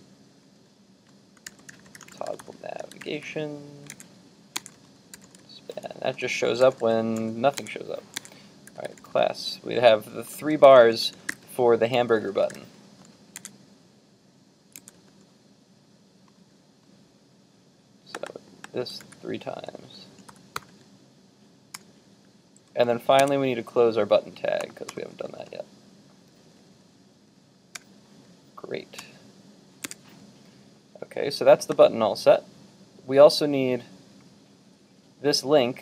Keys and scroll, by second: 4.1 super+Tab, 7.6 super+Tab, 13.4 super+Tab, 14.8 super+Tab, 19.1 super+c, 20.3 super+c, 20.5 super+v, 20.7 super+v, 29.9 super+Tab, 32.9 super+Tab.